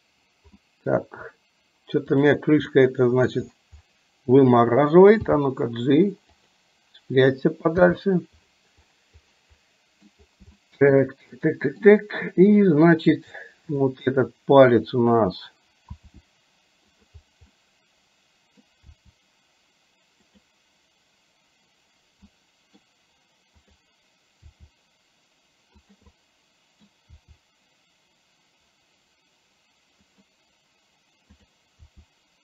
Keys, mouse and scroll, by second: 0.7 middle click, 2.2 drag, 2.8-3.3 middle drag, 5.5 g, 7.8 i, 9.6-10.2 middle drag, 10.6-11.0 shift+middle drag, 11.5-12.0 middle drag, 16.0 r, 17.6-18.7 middle drag, 19.1 r, 22.3-22.8 middle drag, 23.7 click, 24.6 r, 26.2 middle click, 27.3 r, 31.3 click, 32.0 r.